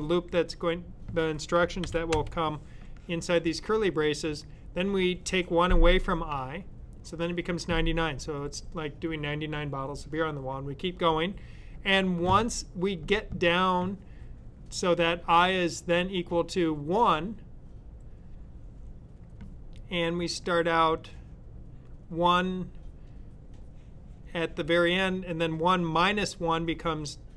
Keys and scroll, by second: 1.7 shift+[.